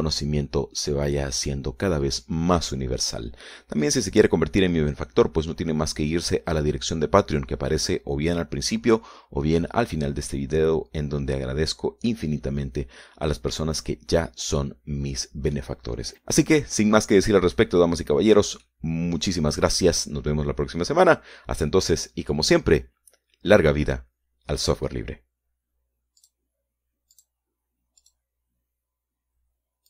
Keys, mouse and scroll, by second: 0.4-2.8 drag, 2.8-4.2 scroll down 1, 4.2-4.6 scroll up 1, 5.1 scroll down 1, 5.4-8.0 drag, 14.9-15.7 scroll up 2, 16.2-17.4 middle drag, 18.0 shift+middle click, 19.0 shift+scroll up 1, 19.4 scroll down 1, 20.1 middle click.